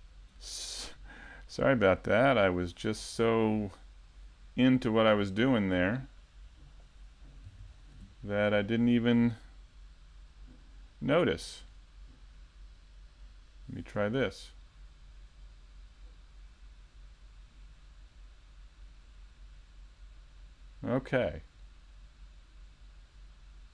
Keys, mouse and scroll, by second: 2.4 scroll up 1, 2.7 middle click, 3.6 Tab, 4.0 right click, 4.5 Tab, 4.8 right click, 5.2 Tab, 5.5 middle click, 6.8 right click, 7.1-7.5 scroll up 1, 8.2 scroll up 1, 9.8 shift+click, 11.0 alt+shift+right click, 11.8 middle click, 13.7 right click, 18.4 middle click, 19.4 a, 19.6 Tab, 19.7-20.3 scroll down 3, 20.1 middle click, 20.8-21.2 scroll down 1, 21.2 a, 21.5 middle click, 23.0 right click, 23.6 middle click.